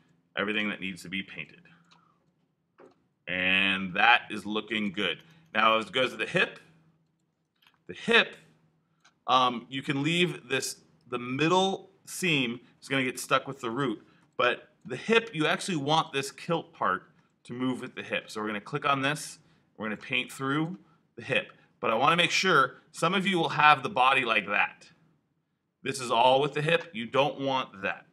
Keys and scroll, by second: 1.2 b.